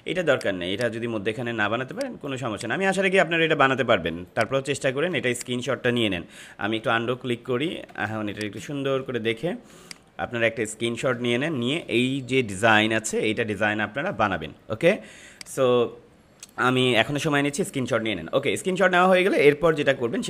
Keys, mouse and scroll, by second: 0.2 click, 1.7 space, 1.9 click, 2.2 space, 2.5 click, 2.5 click, 4.1 space, 4.2 click, 4.3 click, 4.8 space, 5.3 click, 5.6 space, 7.0 ctrl+z, 8.0 space, 8.2 click, 9.1 ctrl+-, 9.7 space, 9.9 click, 10.2 space, 15.3 click, 19.8 ctrl+=.